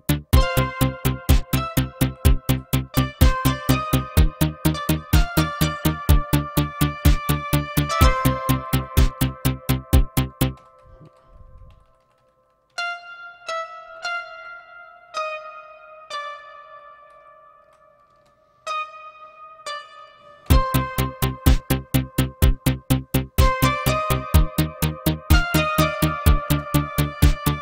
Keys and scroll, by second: 0.3 v, 1.5 c, 2.0 Up, 2.2 Up, 2.4 Delete, 3.5 Up, 3.8 Up, 4.0 Up, 4.6 x, 6.5 Delete, 6.9 Up, 7.0 Up, 7.2 Up, 7.5 Up, 8.5 c, 8.7 Up, 9.0 space, 10.5 F12, 11.0 Page_Down, 11.7 Down, 11.8 Down, 12.0 Down, 12.1 Down, 12.6-16.0 typing, 17.1 Down, 17.6 Up, 18.1 space, 18.6 d, 19.5 x, 20.4 F11, 26.4 space, 26.8 Up, 27.4 Up.